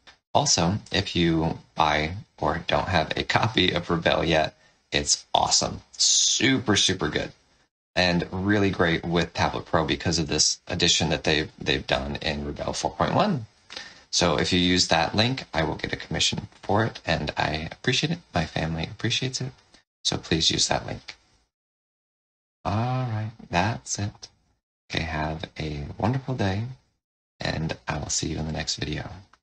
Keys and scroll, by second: 0.0 space, 24.0 space, 27.4 space.